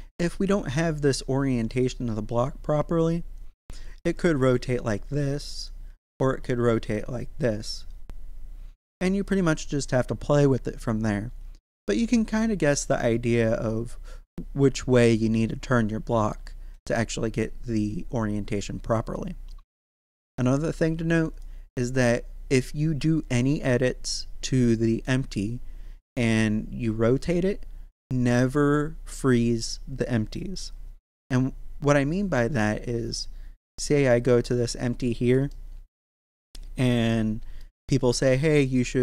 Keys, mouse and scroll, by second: 3.9 r, 4.0 z, 5.5 right click, 5.8 r, 6.0 x, 8.9 right click, 21.3 click, 32.5-33.8 scroll up 1, 33.8 right click, 35.1 scroll up 1, 35.5 shift+middle click, 36.2 shift+scroll up 1, 36.9-39.0 middle drag.